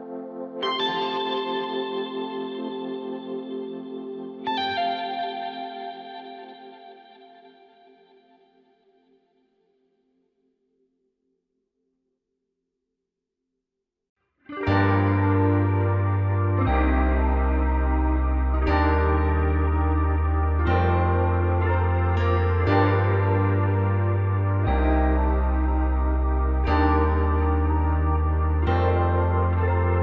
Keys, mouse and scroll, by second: 1.6 click, 2.5-3.7 drag, 5.5 scroll down 2, 6.9-7.5 scroll down 2, 7.5-8.4 scroll down 2, 9.8-12.6 scroll down 1, 12.6 scroll up 3, 15.0-15.5 scroll down 1, 15.5-17.3 scroll down 1, 17.3-20.4 drag, 21.0-22.9 middle drag, 22.9 click, 26.5-29.2 middle drag, 29.2 KP_1.